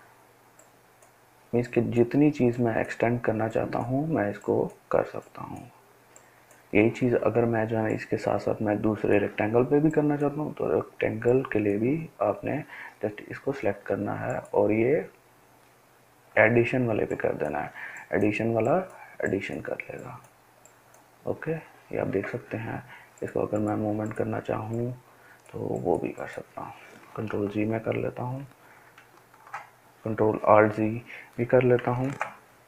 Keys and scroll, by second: 27.2 ctrl+z, 27.7 ctrl+z, 28.4 ctrl+z, 29.0 ctrl+alt+z, 32.0 ctrl+d.